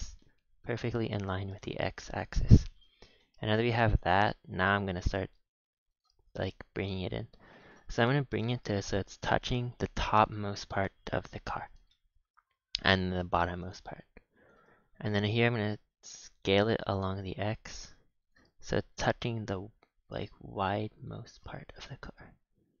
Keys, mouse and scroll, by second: 0.1 shift+middle click, 0.7-1.1 scroll up 3, 1.1-1.4 scroll down 6, 1.6 shift+middle click, 1.9-2.3 scroll down 4, 2.3 shift+middle click, 2.7 a, 2.8 a, 2.9 scroll down 3, 3.1 shift+middle click, 3.5 b, 4.5 g, 6.2-6.6 scroll up 6, 6.6 g, 7.9-8.3 scroll up 7, 8.3 shift+middle click, 8.9 g, 10.3 scroll down 6, 11.4 scroll down 4, 11.9 shift+middle click, 12.2 a, 12.4 a, 13.7 b, 15.0 g, 16.1 s, 18.5-18.9 scroll up 3, 18.9 s, 21.6 scroll up 4, 21.8-22.8 shift+middle drag.